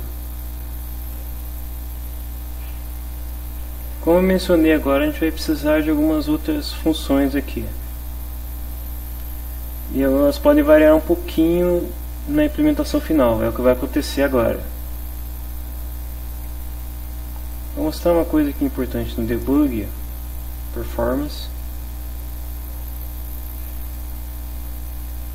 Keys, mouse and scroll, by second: 0.5 click, 1.6 click, 17.5 click, 20.4 click, 23.9 click.